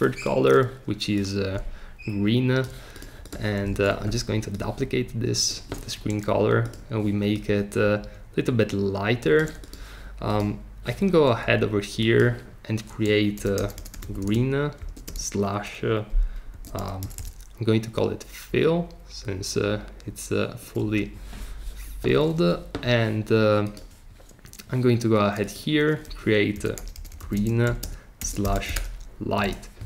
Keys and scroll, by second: 3.7 BackSpace, 13.1-15.0 typing, 16.3-17.6 typing, 20.6 Return, 26.3-29.2 typing, 29.4 Return.